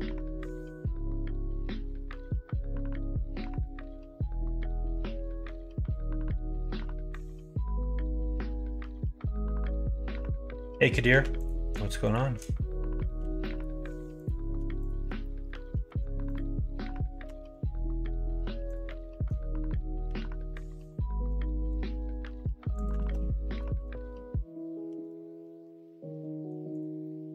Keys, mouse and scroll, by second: 0.8 middle click, 1.4 g, 5.0 middle click, 5.5 shift+middle click, 6.1 middle click, 6.6 shift+middle click, 8.0 shift+middle click, 8.6 middle click, 9.6 middle click, 11.0 2, 11.3 click, 12.0 click, 13.2 f, 13.3 middle click, 14.2 click, 14.7 click, 15.2 middle click, 15.8 1, 16.2 click, 17.2 g, 18.8 middle click, 20.0 g, 22.9 ctrl+z, 23.7 o, 24.8 g, 27.0-27.3 middle drag.